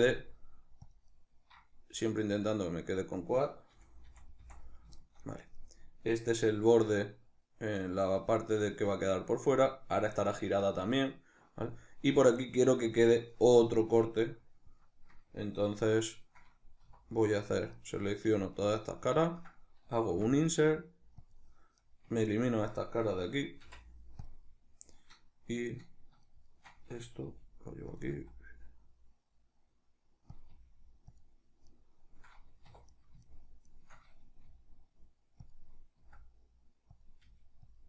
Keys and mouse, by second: 1.0 right click, 2.8 right click, 3.5 f, 4.7-17.0 shift+middle drag, 16.6 3, 17.0 right click, 17.5 ctrl+right click, 17.9 ctrl+right click, 18.3 ctrl+right click, 18.7 ctrl+right click, 18.9 ctrl+right click, 21.1 click, 21.5 right click, 22.2 ctrl+right click, 23.4 x, 25.4 right click, 26.0 shift+right click, 26.2 shift+right click, 27.0 g, 27.7 click, 27.8 s, 30.1 click, 30.2 g, 30.9 click, 31.4 right click, 32.4 2, 32.7 right click, 33.0 shift+right click, 33.4 shift+right click, 34.2 g, 35.3 click, 35.7 s, 36.8 click, 37.0 g, 37.5 click.